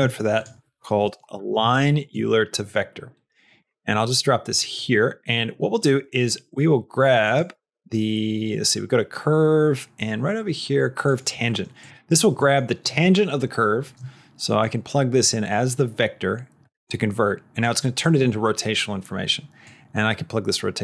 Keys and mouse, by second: 3.8 middle click, 4.5 click, 6.0 middle click, 7.2 click, 7.4 shift+a, 12.3 middle click, 14.5-16.5 drag, 17.5 click, 19.5-20.8 drag.